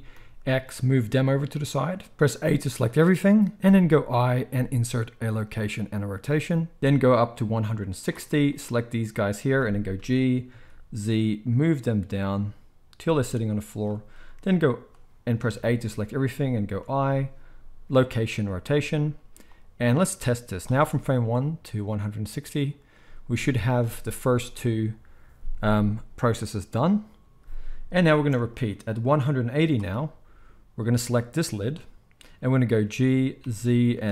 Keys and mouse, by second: 2.1-8.4 middle drag, 2.6 a, 3.9 i, 8.4-13.8 drag, 9.9 g, 13.8-19.5 shift+middle drag, 15.5 a, 16.8 i, 19.5-31.0 drag, 20.7 space, 28.1 space, 32.8 g.